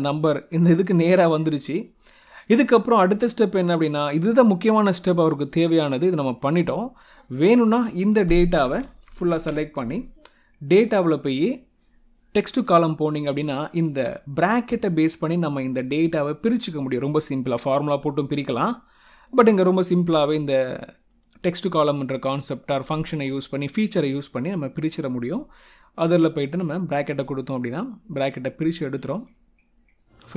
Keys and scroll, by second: 8.9 ctrl+shift+Down.